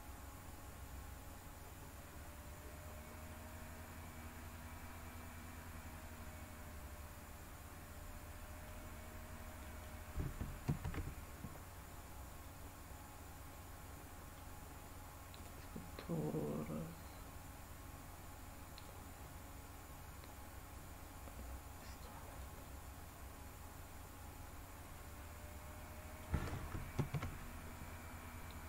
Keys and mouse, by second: 4.5-8.6 middle drag, 9.6 middle click, 10.6 ctrl+z, 12.3 click, 13.5 middle click, 15.4 drag, 18.9-21.8 drag, 22.3 click, 22.6-26.2 middle drag, 27.0 ctrl+z.